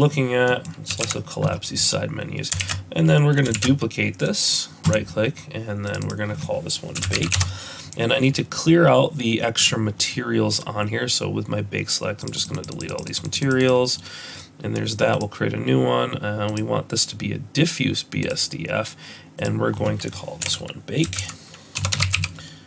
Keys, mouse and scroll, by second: 0.5 middle click, 0.5-0.9 scroll down 1, 0.9 t, 1.1 n, 1.6-2.5 scroll up 1, 2.6 shift+s, 3.7 shift+d, 5.9 click, 6.0 click, 9.6 click, 12.4-13.4 click, 12.7 click, 12.8 click, 13.1 click, 13.3 click, 13.6 click, 15.1 click, 16.5 click, 19.4 click, 21.9 BackSpace.